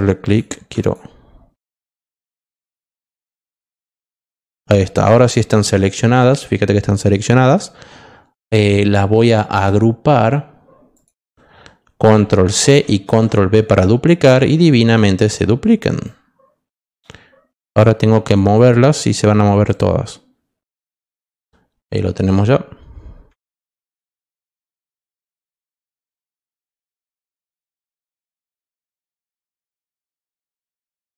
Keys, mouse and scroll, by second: 0.2 click, 0.8 ctrl+click, 1.7 ctrl+click, 2.3 ctrl+click, 3.2 ctrl+click, 4.8 ctrl+click, 9.5 right click, 10.9 click, 12.7 ctrl+c, 13.0 ctrl+v, 16.0 click, 18.2-19.6 drag, 20.9 click, 21.5 middle click, 23.4-23.8 ctrl+scroll up 2, 24.3-24.6 alt+scroll up 2, 25.2 alt+middle click, 26.3 click, 29.0 click.